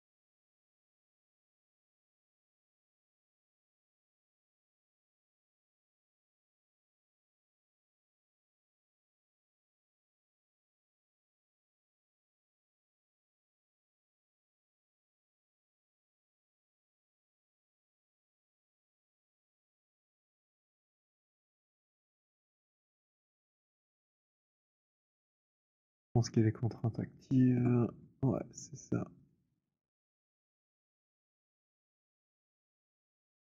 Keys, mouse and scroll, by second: 0.6 alt+scroll, 1.2 alt+right click, 1.2 alt+middle click, 9.7 alt+click, 11.5 alt+middle click, 12.2 alt+right click, 13.5 right click, 14.6 middle click, 16.7 middle click, 17.4 click, 17.4 z, 19.6 b, 24.6 click, 26.8 click, 28.6 click, 29.2 click, 33.0 click.